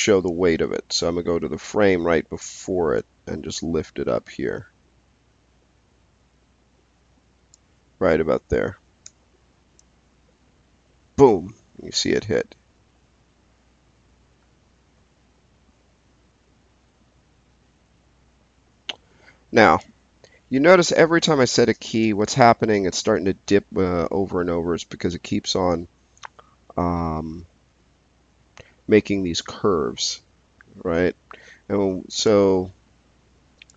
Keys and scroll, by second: 9.0 s, 21.8 space.